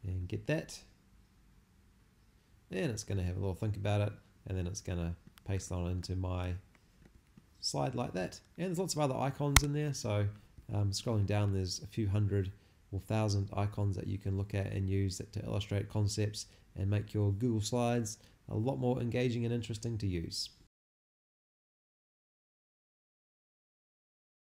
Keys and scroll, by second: 9.5 shift+BackSpace.